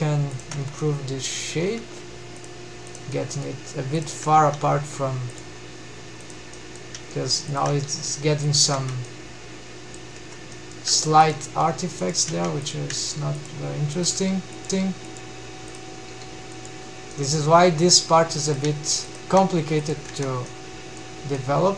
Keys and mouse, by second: 0.1 Tab, 0.3-1.1 middle drag, 1.2 Tab, 2.0 click, 2.5 drag, 2.7 middle click, 3.6 shift+click, 4.4 g, 4.9 click, 5.8 click, 6.1 middle click, 6.6 shift+v, 7.1 shift+click, 7.2 g, 8.1 click, 8.3 Tab, 8.6-9.5 middle drag, 9.7 Tab, 10.2-10.5 middle drag, 10.6 shift+middle drag, 11.4 click, 11.6 shift+v, 12.1 shift+click, 12.7 shift+click, 13.1 g, 14.0 click, 14.2 g, 15.3 click, 15.8 g, 16.1 click, 16.7 middle click, 18.1 click, 18.3 shift+v, 18.6 shift+click, 19.0 g, 19.7 Tab, 20.0-20.6 middle drag, 20.9-21.7 middle drag.